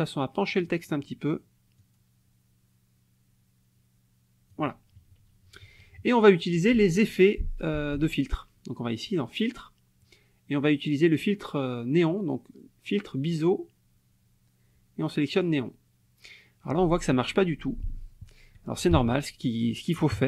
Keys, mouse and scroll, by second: 1.8-4.7 drag, 5.5 KP_Subtract, 8.0 click, 15.3 click, 17.2 click, 18.9 ctrl+z, 20.0 KP_Subtract.